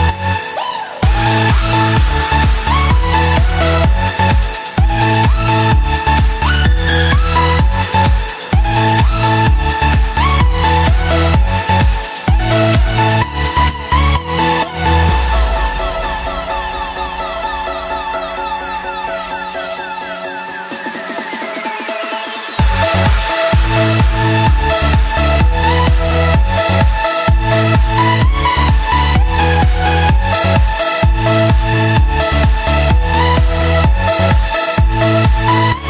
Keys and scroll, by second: 9.2 ctrl+s, 19.7 alt+BackSpace, 20.9 ctrl+d, 22.4 ctrl+t, 26.3 ctrl+0, 30.8 ctrl+-, 31.8 ctrl+s, 35.4 ctrl++.